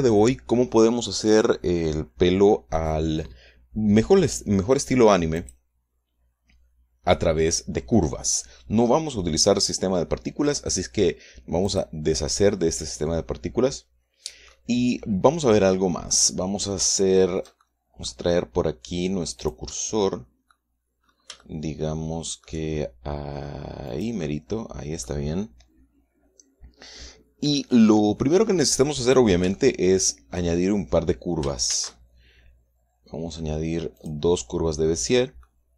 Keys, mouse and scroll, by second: 0.4 click, 5.8 click, 12.1 click, 13.2 scroll down 1, 13.6-15.1 middle drag, 15.1-15.7 scroll down 1, 15.7-18.0 middle drag, 18.4 middle click, 19.9 click, 20.7 middle click, 21.5-21.9 scroll up 1, 21.9-23.1 shift+middle drag, 24.2 middle click, 24.4 click, 24.7-29.6 middle drag, 29.6-29.9 scroll up 1, 30.0 shift+click, 31.0 shift+middle click, 31.9 shift+middle click, 32.2 shift+a, 33.8 middle click, 34.4 click.